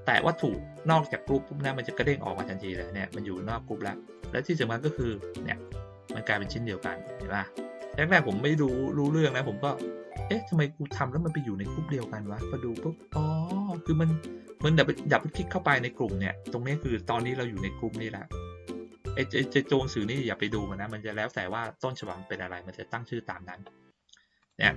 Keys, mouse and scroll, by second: 0.9 click, 4.1 click, 4.9 click, 5.6-9.8 drag, 11.9-12.4 drag, 15.0 click, 15.2 click, 24.4 click.